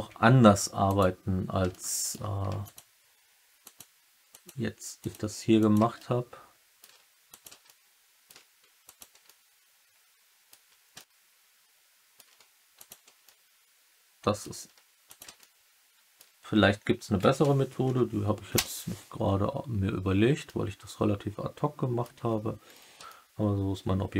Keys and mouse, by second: 0.2 1, 0.8 click, 1.6 alt+middle click, 2.6 shift+click, 3.6 shift+click, 4.2 shift+click, 4.9 shift+click, 5.6 shift+click, 5.9 alt+middle click, 7.2 shift+click, 7.6 alt+middle click, 9.2-10.4 alt+middle drag, 10.9-12.1 alt+middle drag, 12.7 shift+click, 13.2 alt+middle click, 13.6 alt+click, 15.3 alt+middle click, 17.1 s, 17.4 x, 17.8 0, 18.5 Return, 20.4-22.0 alt+middle drag, 22.1 Tab, 23.0-24.1 alt+middle drag.